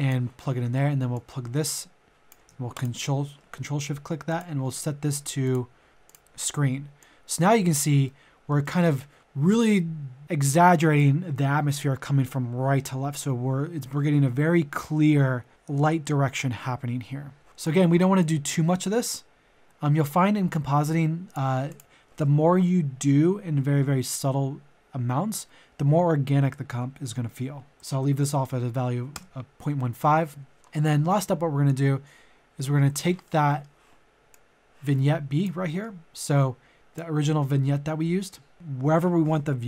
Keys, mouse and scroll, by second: 2.7 ctrl+shift+click, 8.0 middle click, 18.2-21.7 drag, 27.7 KP_Decimal, 28.0 KP_1, 28.1 KP_5, 30.5 scroll down 1, 30.8 middle click, 31.6-33.2 drag, 33.2 middle click, 34.3 click, 35.6 middle click, 36.5 scroll up 1, 36.7 click, 37.4 middle click.